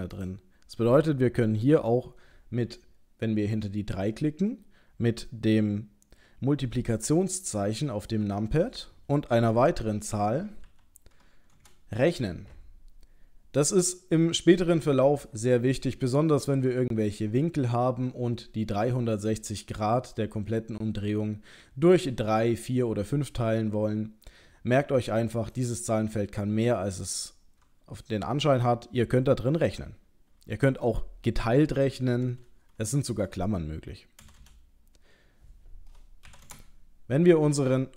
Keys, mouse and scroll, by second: 25.6 click, 34.4 BackSpace, 37.8 middle click.